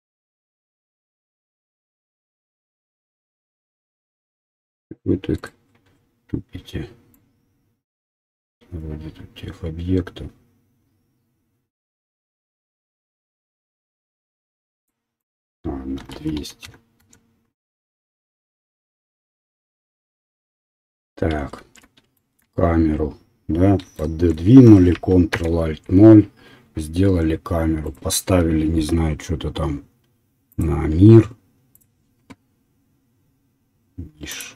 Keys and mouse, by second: 5.5-7.1 middle drag, 7.1-16.0 drag, 16.3 KP_0, 18.4 click, 21.6 shift+z, 24.5-27.4 ctrl+right drag, 25.6 ctrl+alt+KP_0, 27.4-30.6 middle drag, 30.6-34.4 drag, 34.4 middle click.